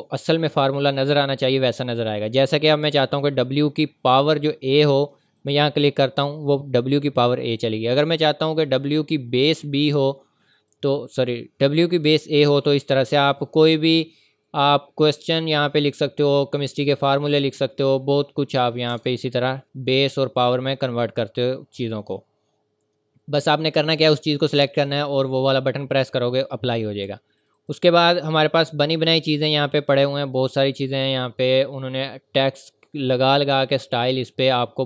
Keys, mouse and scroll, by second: 5.4 click, 10.5 click, 13.6 click, 18.6-19.4 typing, 20.5 typing, 23.6-24.3 typing, 23.8 click, 27.4 click.